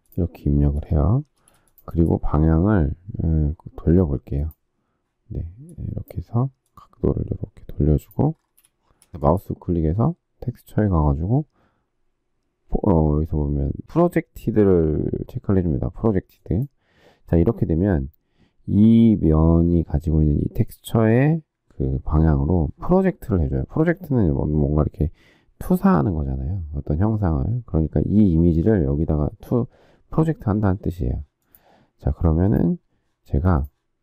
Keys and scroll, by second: 1.3 space, 8.9 space.